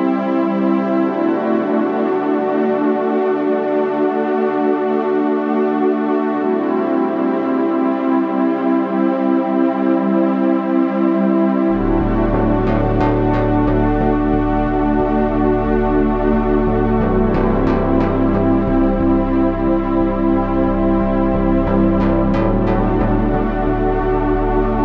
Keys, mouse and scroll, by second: 1.6 ctrl+r, 2.7 s, 5.1-6.3 drag, 6.3 ctrl+Tab, 8.0 z, 8.2 z, 8.4 c, 11.5 click, 11.5 c, 11.8 middle click, 13.2 c, 14.4 click, 16.4 click, 17.7 c, 18.8 click, 20.1 c, 22.1 c.